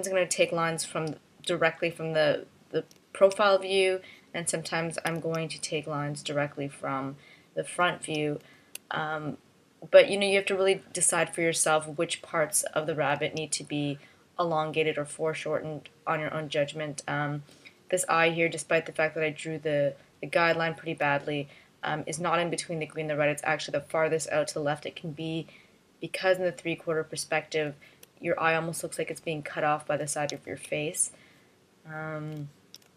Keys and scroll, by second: 5.2 space, 8.9 space, 14.9 space, 20.8 space, 28.1 space, 30.9 space.